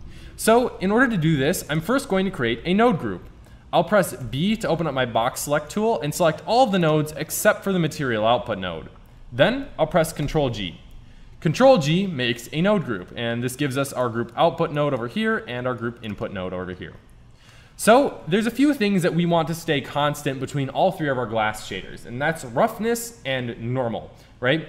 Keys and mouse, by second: 3.7 middle click, 4.2 b, 7.1-9.1 drag, 10.2 ctrl+g, 19.5-24.6 middle drag.